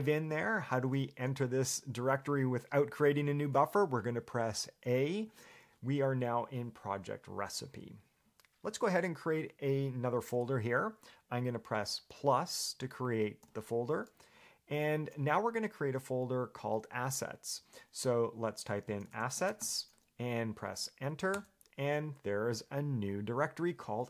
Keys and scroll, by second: 5.5 a, 18.8-20.3 typing, 21.6 Return.